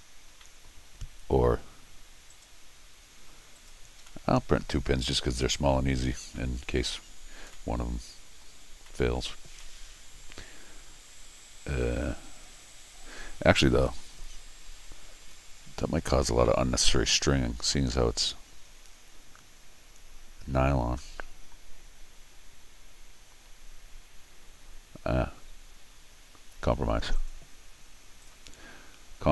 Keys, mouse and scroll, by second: 0.4 middle click, 2.3 right click, 3.6 click, 4.1-5.1 middle drag, 5.4 scroll down 1, 5.5 middle click, 6.2 middle click, 6.4 middle click, 7.1 middle click, 7.5 middle click, 8.9 middle click, 9.4 scroll down 1, 9.6-13.1 middle drag, 27.2 click, 28.2 click.